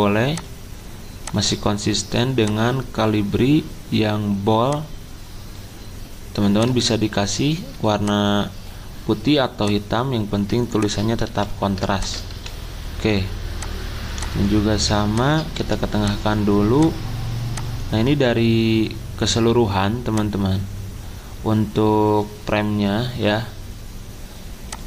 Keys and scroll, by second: 11.3 typing.